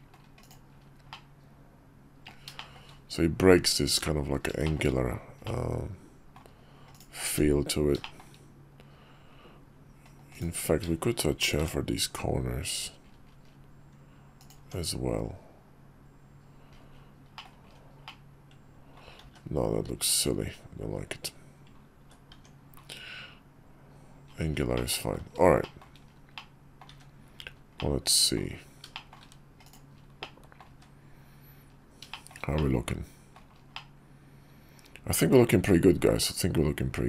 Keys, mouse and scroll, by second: 0.2 click, 0.8-2.0 middle drag, 2.3 shift+middle drag, 4.3 shift+middle click, 5.2-6.1 middle drag, 6.7 click, 7.0 Tab, 7.7 shift+middle click, 10.0 click, 11.2 ctrl+shift+b, 14.3 Tab, 17.1 middle click, 17.8-18.7 middle drag, 20.5 ctrl+z, 20.6 ctrl+z, 21.0 middle click, 21.4 middle click, 22.0 Tab, 24.5 middle click, 25.3 shift+middle click, 26.1 middle click, 27.5-28.1 middle drag, 28.7 shift+middle drag, 29.3 click, 29.9-30.3 middle drag, 31.8 shift+middle drag, 32.3-33.1 middle drag, 33.4-37.0 middle drag.